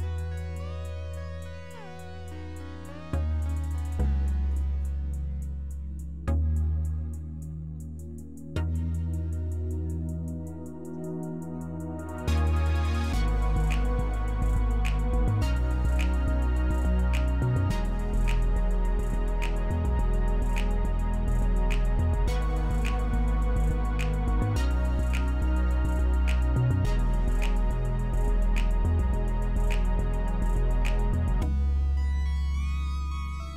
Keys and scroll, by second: 5.6-6.0 typing, 6.2 Return, 11.8-12.5 typing, 12.6 Return, 22.1-22.6 typing, 22.8 Return.